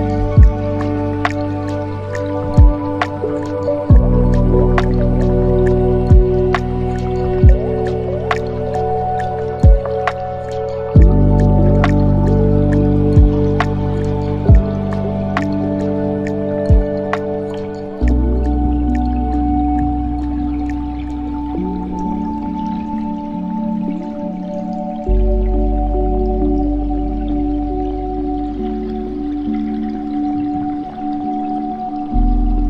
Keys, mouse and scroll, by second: 1.1 click, 1.8-3.0 drag, 3.0 KP_0, 4.8 shift+a, 7.0-8.3 drag, 8.3 KP_7, 9.0-9.6 scroll up 6, 10.6 ctrl+alt+KP_0, 11.4 scroll down 1, 18.5-19.4 shift+drag, 19.4-20.1 scroll up 5, 20.1 scroll down 5, 25.8-29.0 drag, 29.7 click, 30.1-31.0 scroll up 2, 31.8 click.